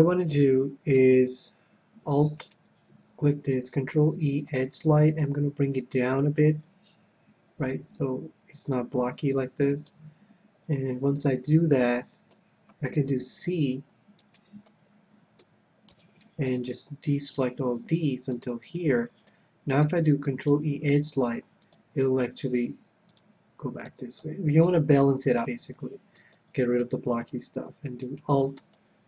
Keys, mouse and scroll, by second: 1.5 middle click, 2.4-4.4 right drag, 3.8 ctrl+e, 9.9-11.5 drag, 11.2-12.8 middle drag, 13.5 c, 14.4-16.0 right drag, 14.7-16.6 middle drag, 16.0 c, 16.1 right click, 18.8-20.5 right drag, 19.3-21.0 middle drag, 20.5 ctrl+e, 23.2-24.9 drag, 23.9 a, 24.2-28.3 middle drag, 28.3-29.0 right drag, 28.9-29.0 middle drag.